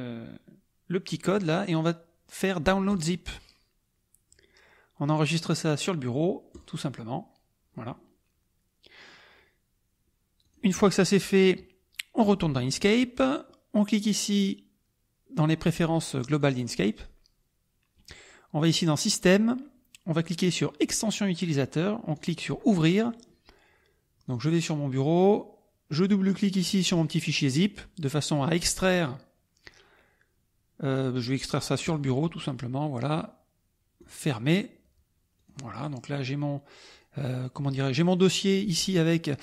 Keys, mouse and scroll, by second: 2.9 click, 6.5 click, 10.4 click, 12.2 click, 16.4 click, 22.1 click, 24.2 click, 26.0 click, 26.9 click, 28.2 click, 28.8 click, 31.8 click, 33.9 click, 35.3 click, 35.8 click, 36.9 click.